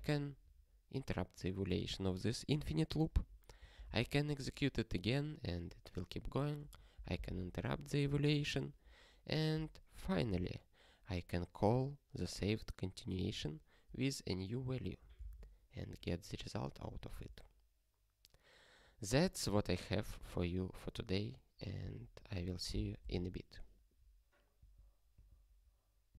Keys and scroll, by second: 0.0 ctrl+b, 4.0 ctrl+e, 7.3 ctrl+b, 10.1 ctrl+alt+f, 15.3 ctrl+e.